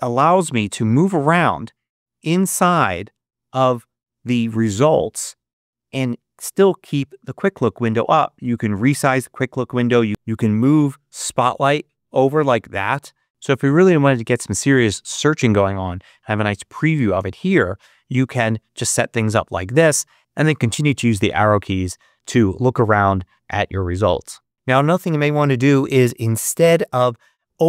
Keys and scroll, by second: 0.9 Right, 2.1 Right, 20.3 Left, 21.5 Left.